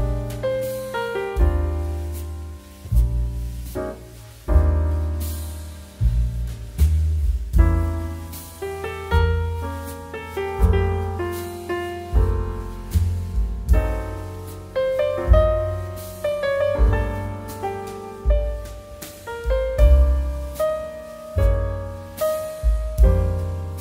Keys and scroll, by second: 20.1 2.